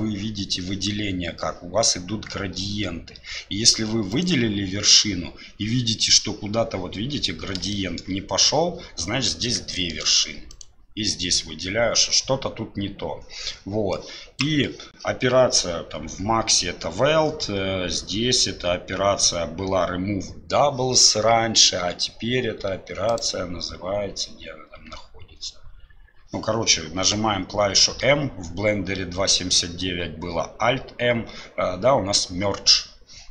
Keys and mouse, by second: 4.1 click, 7.7 shift+click, 9.7 shift+click, 14.1 click, 23.1-26.3 drag, 28.0 m.